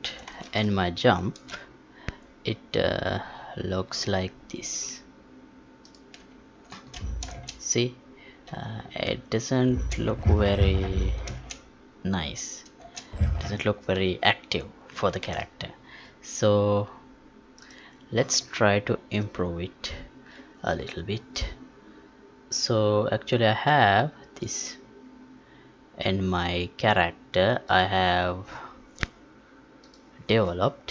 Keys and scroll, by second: 0.1 ctrl+p, 11.3 space, 12.8 space, 15.3 ctrl+p.